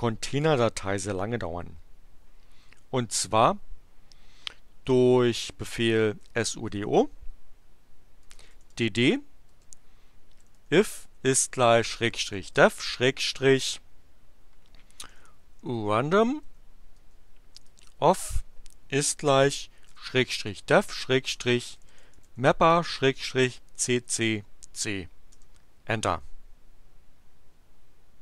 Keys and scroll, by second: 5.9-8.4 typing, 9.5-13.1 typing, 14.8-23.7 typing, 25.3 Return.